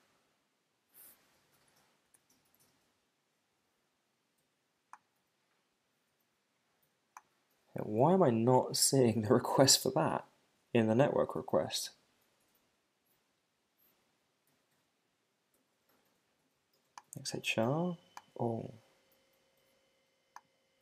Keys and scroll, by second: 2.0 super+Return.